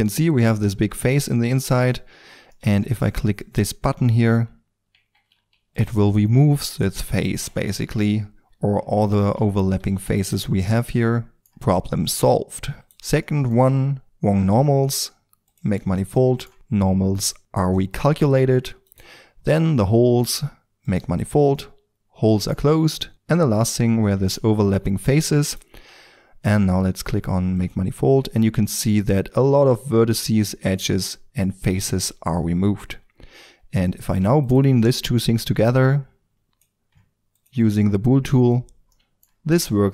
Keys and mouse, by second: 1.4 KP_5, 3.4-4.6 middle drag, 4.9 Tab, 5.5-7.3 middle drag, 5.5 f, 7.9 KP_5, 9.7 shift+f, 11.3 Tab, 13.4-14.0 middle drag, 14.0-18.8 drag, 20.8-21.9 drag, 23.1-24.0 right drag, 24.0 Tab, 24.6 g, 25.7 Tab, 34.0-38.9 drag, 38.9-39.9 middle drag.